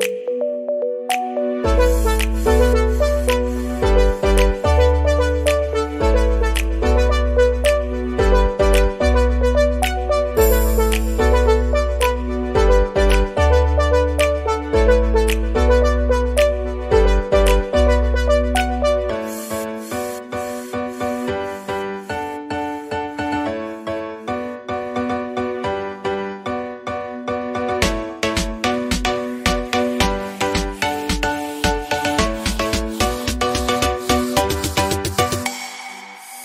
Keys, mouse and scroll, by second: 1.8-2.5 scroll down 5, 2.5 click, 5.2 click, 6.2-7.5 middle drag, 7.5 scroll up 2, 8.1-11.7 middle drag, 12.4 click, 13.1 scroll down 2, 13.4 middle click, 14.1 click, 14.6-15.2 scroll down 7, 15.2-16.9 middle drag, 19.7 KP_0, 20.3 middle click, 20.3-21.2 scroll up 5, 21.2-21.7 scroll down 1, 21.7-23.1 scroll up 1, 23.1 click, 23.6-24.7 drag, 26.3 click, 26.8-29.6 drag, 29.6-30.9 scroll up 11, 31.3-32.4 scroll down 13.